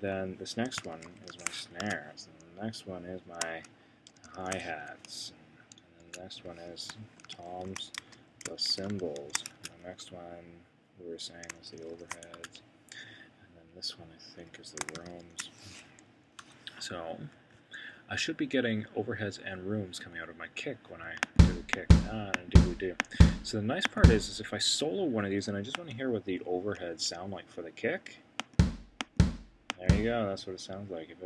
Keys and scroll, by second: 0.7-1.8 typing, 1.9 Tab, 4.3 shift+h, 6.0 Tab, 8.4-9.6 typing, 12.0 shift+h, 12.3 Tab, 14.7-15.9 typing.